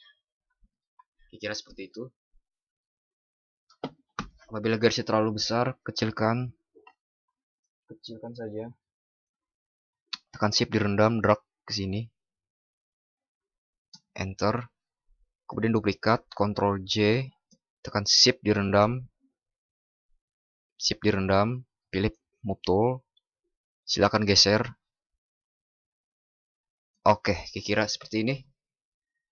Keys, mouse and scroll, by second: 6.1 ctrl+t, 16.4 ctrl+j.